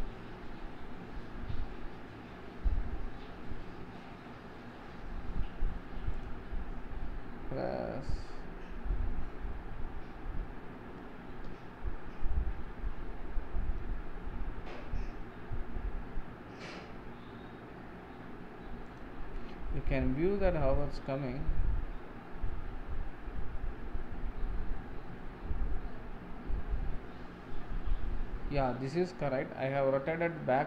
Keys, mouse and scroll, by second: 11.5 KP_1, 13.7 r, 20.7 r.